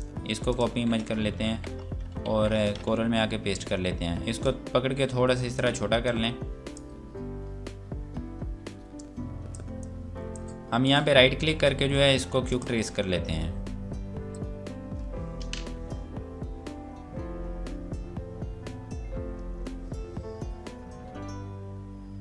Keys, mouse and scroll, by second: 0.4 click, 1.4 Tab, 2.3 ctrl+v, 3.1 F4, 3.6-4.4 scroll down 1, 4.4 click, 7.0 scroll up 1, 9.0 click, 10.7 right click, 12.5 click.